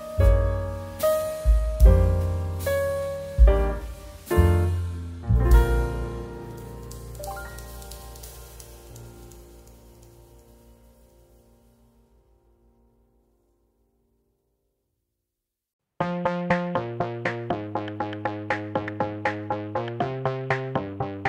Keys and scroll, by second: 14.7 KP_1, 14.7 KP_0, 14.8 KP_0, 15.0 Return, 19.1 KP_1, 19.3 KP_5, 19.4 KP_0, 19.7 Return.